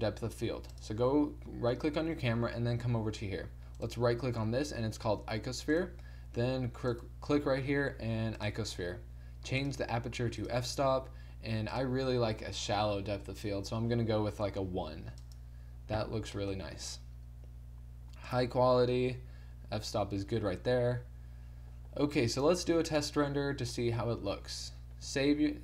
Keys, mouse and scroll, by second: 0.7 click, 3.3 middle click, 3.8-4.9 right drag, 4.9 click, 9.5-11.6 drag, 15.8 middle click, 16.4-20.5 drag, 20.5-22.9 middle drag, 22.9-24.9 drag, 24.9 middle click.